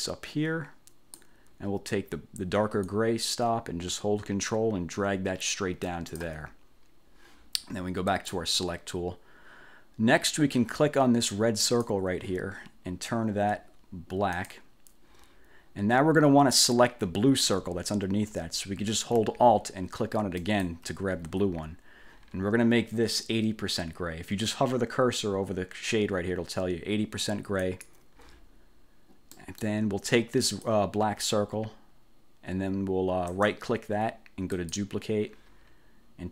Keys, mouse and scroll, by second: 3.0-6.5 drag, 8.3 click, 11.7 click, 14.5 click, 17.3-17.7 ctrl+scroll up 2, 20.5 alt+click, 27.7 click, 29.5 click, 30.6 click, 33.4 right click, 34.7 click.